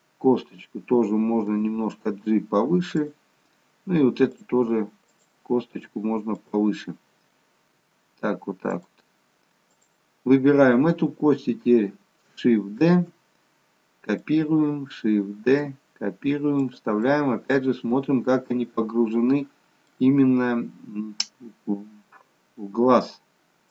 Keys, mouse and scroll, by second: 1.5 g, 4.4 click, 5.9 g, 9.7 click, 12.9 shift+d, 17.0 middle click, 17.0 shift+d.